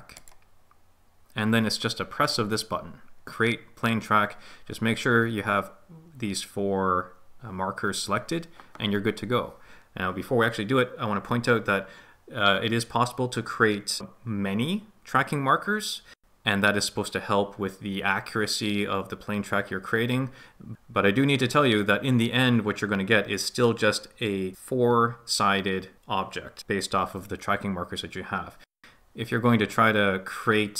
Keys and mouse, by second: 0.3-1.3 middle drag.